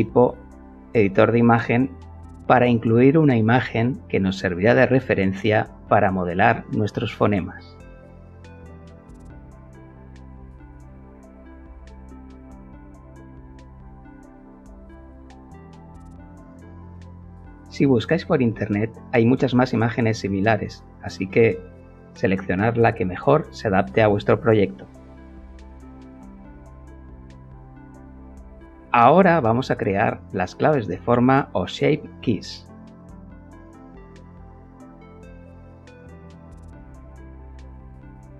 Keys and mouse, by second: 0.7 click, 2.1 click, 3.5 click, 6.5 click, 8.5 click, 8.7 click, 9.6 click, 12.4-13.7 middle drag, 13.9 middle click, 15.2 click, 20.1 click, 21.8-23.9 shift+middle drag, 24.1 Tab, 28.0 click, 31.1 click, 33.7 click, 35.2 click, 35.4 click, 37.9 shift+a.